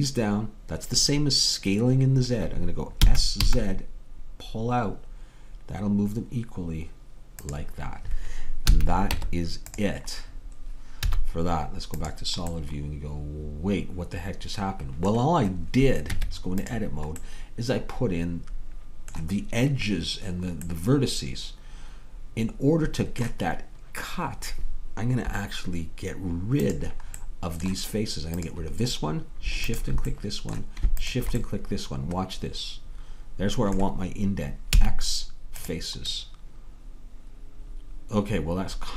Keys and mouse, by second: 3.1 s, 8.8 a, 9.1 Tab, 11.1 z, 16.2 Tab, 28.5-33.8 drag, 34.8 x.